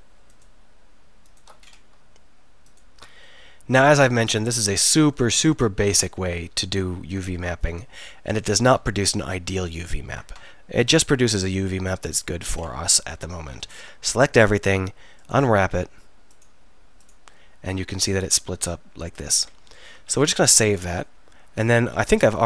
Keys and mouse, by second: 3.4-4.9 middle drag, 4.9 ctrl+z, 6.6-9.2 middle drag, 12.2 click, 13.4 a, 13.6 a.